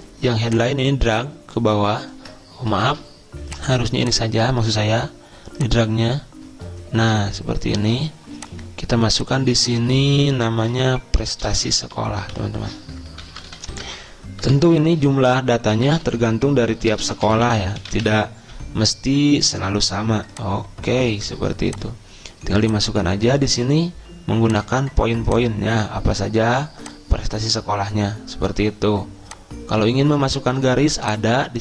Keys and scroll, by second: 3.1 ctrl+z, 11.0 Delete, 12.1 ctrl+shift+Right, 12.6 ctrl+shift+Right, 13.3-18.8 typing.